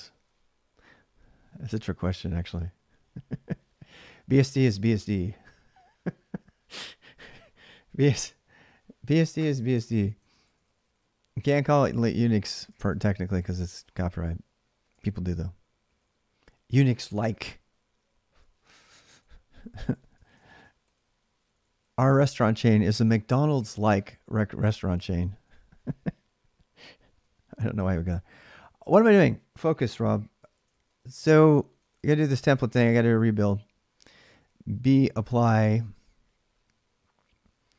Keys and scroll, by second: 10.0-13.8 typing, 15.6 ctrl+a, 15.6 k, 15.8 ctrl+a, 19.7-20.8 typing, 25.1 ctrl+a, 25.1 j, 25.2 ctrl+a, 31.3-32.2 typing, 33.5-35.4 typing.